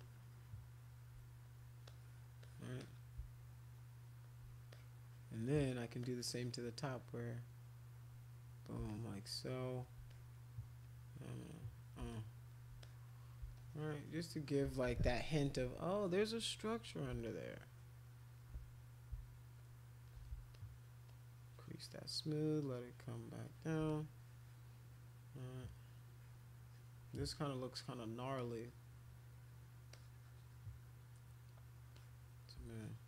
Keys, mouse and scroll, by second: 0.0 shift+click, 1.8 click, 2.4 click, 2.8 click, 3.5 shift+click, 4.7 click, 6.0 click, 7.0-8.6 drag, 8.9 shift+click, 10.1 click, 10.8-11.9 drag, 12.1 shift+click, 12.8 click, 13.6-14.6 shift+drag, 15.4 ], 15.6 ], 17.3-18.3 shift+drag, 19.6 shift+click, 20.5 shift+click, 21.1-22.6 shift+drag, 22.7 shift+click, 23.8-27.1 drag, 28.3-29.7 drag, 29.9-31.3 drag, 31.9 click, 32.8 alt+click.